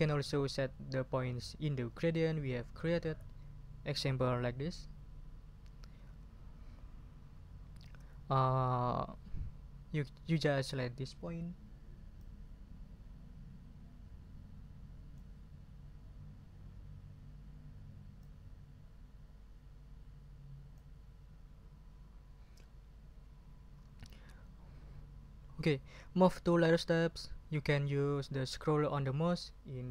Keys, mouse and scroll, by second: 12.2-15.3 drag, 18.2 click.